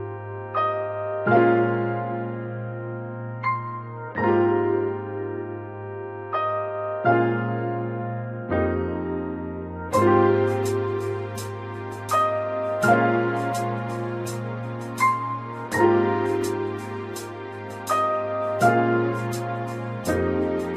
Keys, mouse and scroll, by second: 6.4 shift+click, 8.5 click, 15.4 right click, 16.8 click.